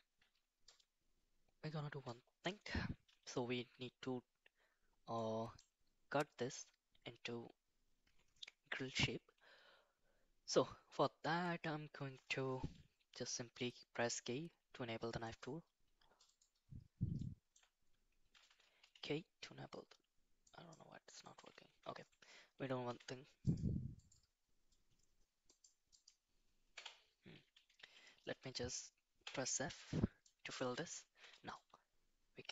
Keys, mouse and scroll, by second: 5.2 middle click, 12.6 k, 17.1-27.0 shift+middle drag, 27.8 a, 29.3 f, 30.2 shift+middle click, 31.2 k.